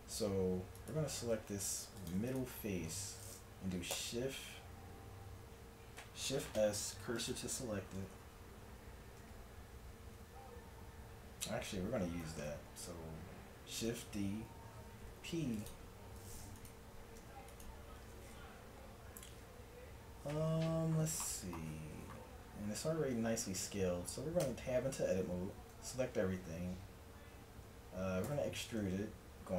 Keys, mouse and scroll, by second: 1.3 ctrl+Tab, 4.1 shift+s, 8.2 Tab, 9.3 Tab, 12.3 shift+d, 15.1 p, 16.6 click, 17.3 Tab, 24.5 Tab, 25.4 a, 28.3 e.